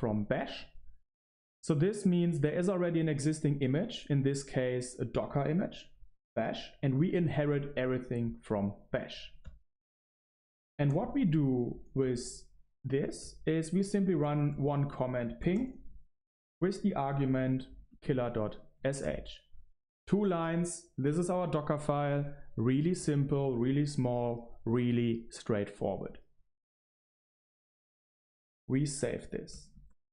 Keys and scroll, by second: 6.0 super+3, 7.0 ctrl+alt+shift+1, 7.3 super+3, 7.3 ctrl+alt+shift+1, 10.8-13.3 typing, 13.7 Return, 14.4 ctrl+b, 14.5-19.2 typing, 18.4 ctrl+l, 20.6-21.4 typing, 28.3 ctrl+alt+shift+1.